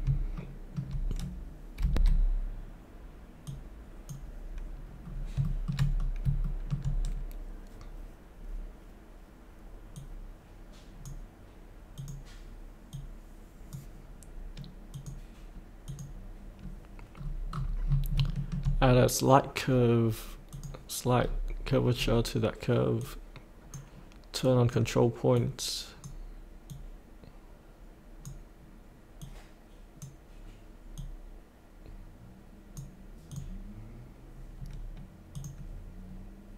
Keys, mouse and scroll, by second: 0.3 shift+middle click, 1.8 F8, 3.4-4.9 drag, 5.0 scroll down 1, 5.9 scroll down 1, 6.4 shift+middle click, 9.9-14.0 drag, 17.2-18.1 scroll down 1, 18.3 shift+middle click, 20.5 click, 21.1-21.9 scroll down 1, 23.0-36.5 drag.